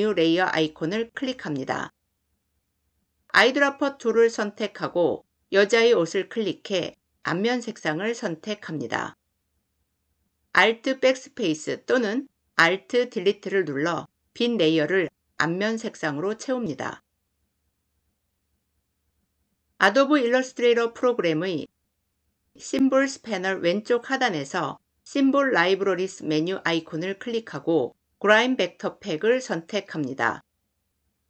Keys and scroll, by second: 3.3 i, 10.6 alt+Delete.